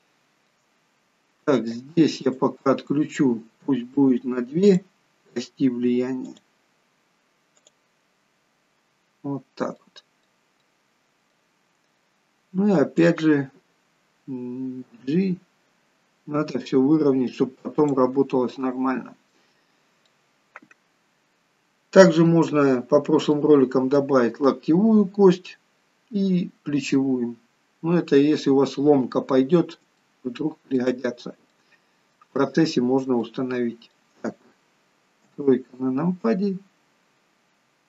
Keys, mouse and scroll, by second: 0.9 scroll up 4, 2.3 click, 4.7 click, 7.6 click, 9.1 scroll down 1, 9.8 middle click, 10.6 middle click, 11.6-12.0 scroll down 2, 13.0 click, 15.0 g, 18.5 middle click, 19.6-20.2 scroll up 3, 20.1 middle click, 22.8-23.4 scroll down 2, 23.4 middle click, 27.0 middle click, 29.5 scroll down 2, 30.1 shift+middle click, 31.1-31.5 scroll down 1, 31.5 middle click, 32.4 shift+middle click, 33.3 middle click, 35.2 KP_3, 36.4-36.9 scroll up 2.